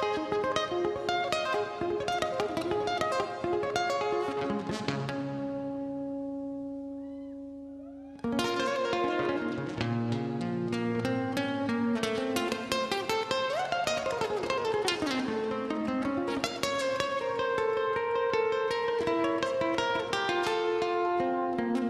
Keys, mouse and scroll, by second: 0.1 KP_0, 2.0-2.9 typing, 3.3 Return, 4.9 KP_1, 7.6 click, 9.3 scroll down 1, 9.7 scroll up 1, 10.3 middle click, 10.7 scroll down 1, 12.0 j, 12.6 Return, 16.6 Escape, 17.5-18.9 typing, 18.7 click, 21.0 space.